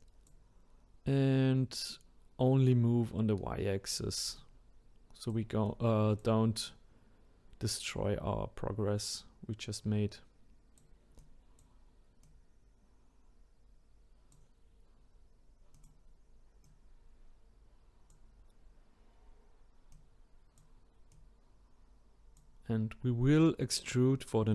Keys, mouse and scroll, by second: 1.9-3.0 drag, 4.3-9.7 drag, 11.2-12.4 drag, 15.7 click, 16.6-19.6 drag, 19.9-21.2 drag.